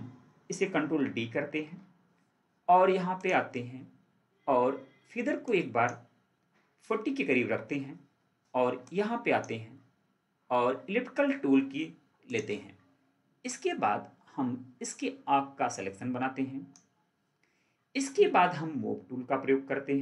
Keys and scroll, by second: 1.4 ctrl+d.